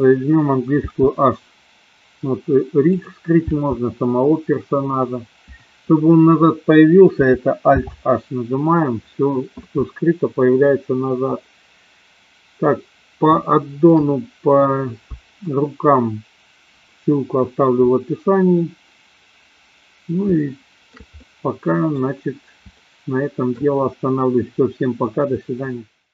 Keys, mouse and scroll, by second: 0.8 h, 2.9 click, 3.5 h, 7.7 alt+h, 13.4-14.0 shift+middle drag, 20.3-21.0 shift+middle drag, 21.2-22.0 middle drag, 22.8-23.5 shift+middle drag.